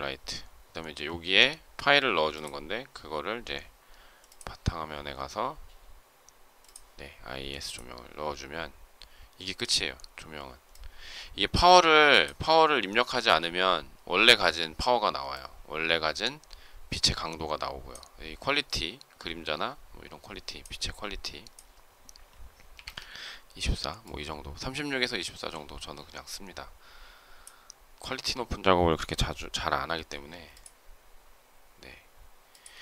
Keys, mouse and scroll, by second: 29.8 m, 32.6 space.